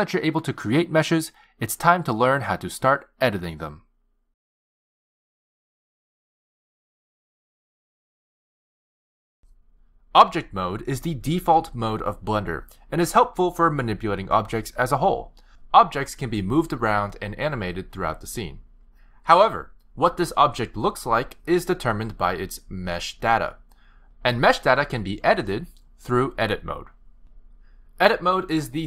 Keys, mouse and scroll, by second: 0.0 click, 18.1 g, 23.7 click.